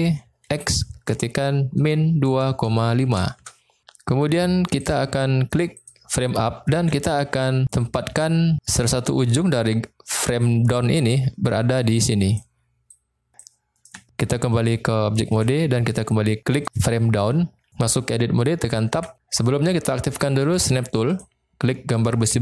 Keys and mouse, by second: 0.5 x, 1.7 -, 2.3 2, 2.6 ., 2.9 5, 3.3 Return, 4.2 Tab, 5.7 click, 6.8 Tab, 8.9-12.7 d, 10.4-13.3 drag, 13.3 d, 13.4 click, 15.3 Tab, 18.9 Tab, 21.0 click.